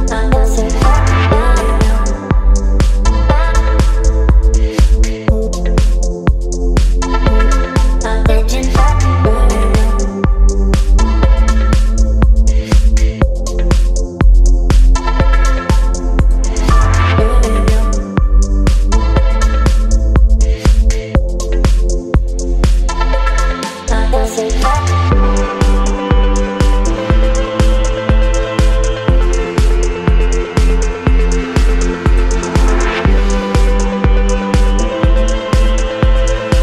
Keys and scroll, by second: 0.1 Return, 2.8 ctrl+g, 5.7 space, 6.6 ctrl+j, 7.3 ctrl+t, 13.0 space, 20.3 space, 26.8 Right, 26.9 Right, 27.0 Right, 27.1 Right, 27.3 Right, 27.5 Right, 28.0 space, 33.0 Left.